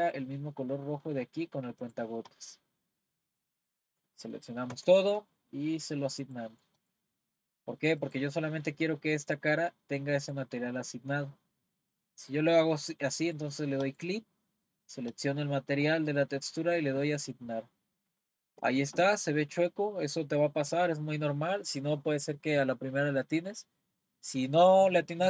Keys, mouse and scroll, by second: 4.7 a, 6.2-7.3 drag, 7.3 middle click, 8.0-13.2 drag, 13.8-21.1 drag.